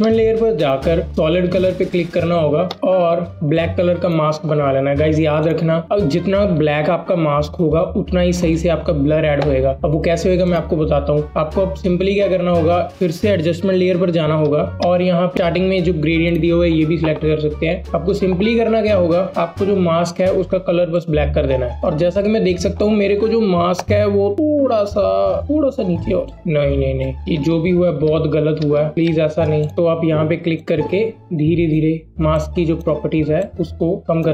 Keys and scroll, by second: 27.4 ctrl+z, 28.4-28.9 typing.